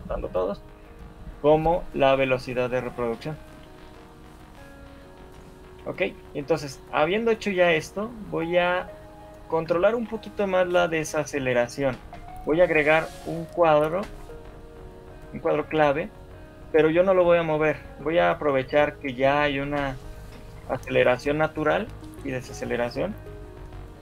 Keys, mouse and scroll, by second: 2.8 shift+middle click, 3.8 shift+middle click, 4.8 right click, 5.8-6.2 scroll down 5, 6.0 shift+middle click, 6.6 right click, 8.0 scroll up 4, 8.2 shift+middle click, 9.3 scroll down 1, 10.9 Left, 11.3 Left, 12.0 Right, 12.6 Right, 13.0 Left, 14.0 Right, 14.2 Right, 14.8 Left, 15.0 Left, 17.8 Right, 18.0 Right, 18.6 Left, 18.8-19.4 Left, 19.6 Left, 19.8 Left, 20.0 Right, 20.2 Right, 20.4 Right, 20.6 Right, 21.0 Right, 21.2 Right, 21.8 Right, 23.4 Left.